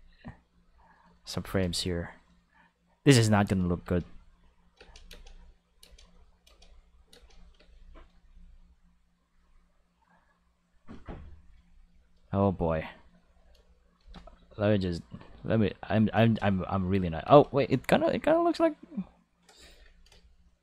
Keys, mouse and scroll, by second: 1.4 shift+d, 3.0 click, 3.5 click, 3.8-8.1 typing, 4.9 click, 5.9 click, 7.3 click, 8.3-10.7 drag, 11.5 a, 14.0 shift+d, 15.4 ctrl+shift+click, 15.8 ctrl+shift+click, 16.2 space, 17.2 space, 17.4-18.9 ctrl+shift+drag, 19.7 a.